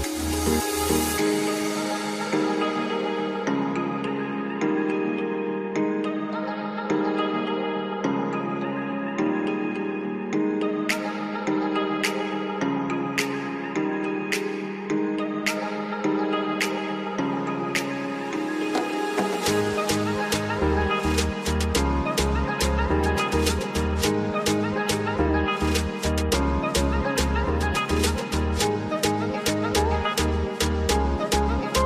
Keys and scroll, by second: 3.1 F2, 5.9 F3, 15.6 ctrl+z, 18.8 F2, 26.9 F2, 29.0 F3.